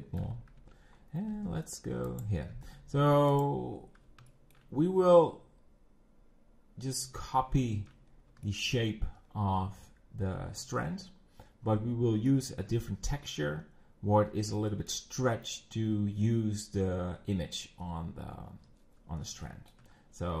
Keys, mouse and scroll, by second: 0.3 e, 0.6 Tab, 1.0 scroll down 1, 1.2 g, 2.5 g, 3.7 scroll, 4.3-7.3 shift+middle drag, 8.1 scroll, 8.5 shift+middle click, 8.8 shift+middle click, 9.3 scroll, 12.4-14.1 shift+middle drag, 14.1 scroll, 14.8-19.2 shift+middle drag, 19.5 shift+m, 20.0-20.4 scroll.